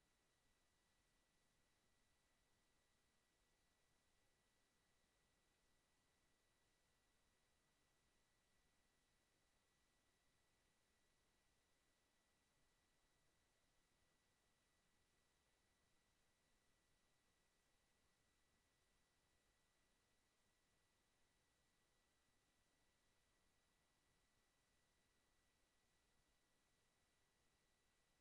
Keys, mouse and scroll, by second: 0.5 click, 2.2 click, 4.0 click, 5.1 KP_2, 5.4 KP_Enter, 6.8 middle click, 7.4 click, 11.3 click, 12.3-13.5 right drag, 15.6 click, 17.8 click, 18.5 click, 20.8 KP_5, 21.2 KP_Enter, 21.9 middle click, 22.5 click, 23.5 click, 24.5 click, 25.5 click, 28.1 click.